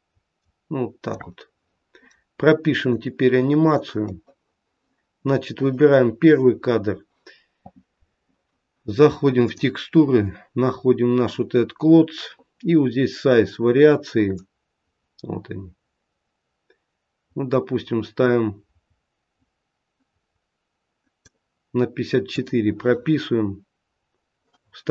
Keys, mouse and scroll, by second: 2.9 click, 9.5 click, 10.5-11.9 scroll down 2, 11.9-12.4 scroll down 1, 14.4 click, 22.3 click.